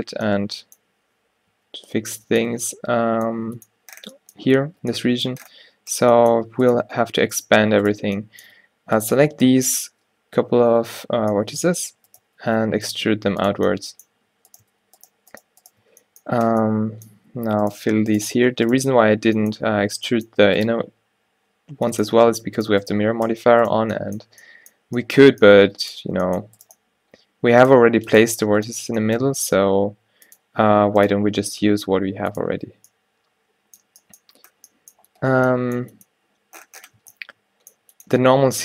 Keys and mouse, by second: 0.1 a, 1.6 ctrl+n, 2.6 Tab, 3.5 a, 4.8 Tab, 10.6 o, 12.1 e, 12.3 s, 13.1 g, 14.6-16.8 drag, 16.5 f, 23.3 f, 26.3 g, 29.0 g, 31.1-32.6 drag, 31.3 g, 32.6 Tab, 37.1 Tab.